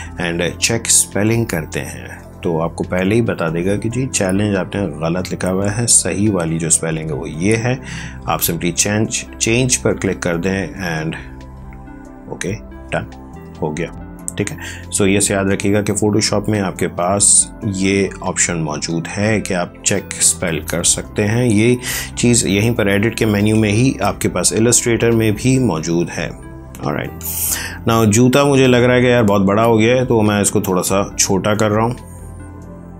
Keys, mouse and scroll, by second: 0.8 click, 3.3 click, 9.7 click, 14.0 click, 14.9 ctrl+t, 16.3 click, 23.1 v, 23.9 Up, 28.0 click, 29.1 ctrl+t, 30.4 click.